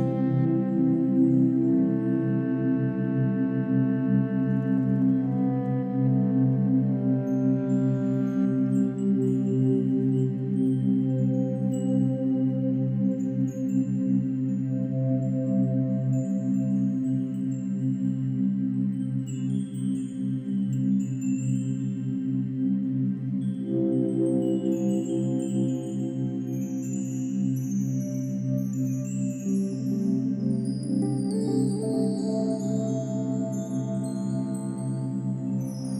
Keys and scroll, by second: 1.2 ctrl+alt+shift+n, 1.4 ctrl+alt+g, 7.9 ctrl+alt+shift+n, 9.0 ctrl+-, 9.0 ctrl+=, 9.3 space, 18.1 ctrl+d, 21.1 ctrl+d, 32.5 ctrl+d.